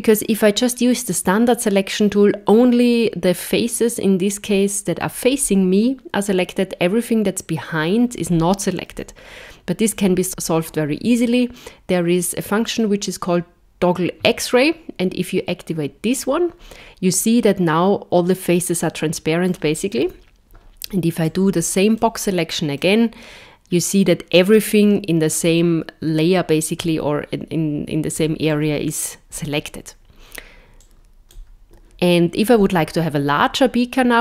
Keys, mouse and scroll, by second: 8.9 KP_1, 16.1 click, 17.1 middle click, 20.1 KP_1, 21.2 click, 22.8 middle click, 29.3 KP_1, 30.8 click.